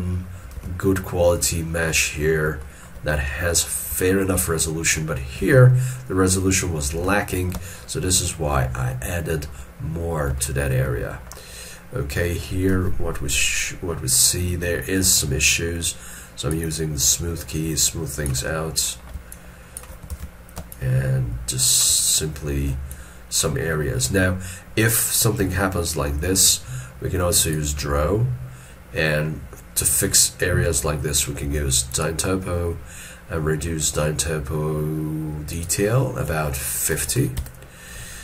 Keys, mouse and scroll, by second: 0.6 alt+e, 2.6 shift+middle click, 3.2 middle click, 5.4 alt+e, 5.8 scroll up 1, 7.0 alt+e, 7.8 shift+middle click, 8.5 scroll down 1, 9.0 scroll down 1, 9.2 shift+middle click, 10.4 shift+middle click, 12.8 alt+e, 13.6 scroll up 1, 15.2 shift+click, 16.7 shift+click, 18.6 middle click, 19.3 shift+click, 20.1 alt+e, 20.7 shift+click, 22.1 middle click, 22.9 shift+click, 23.7 middle click, 25.3 scroll up 1, 25.5 alt+e, 37.0 5.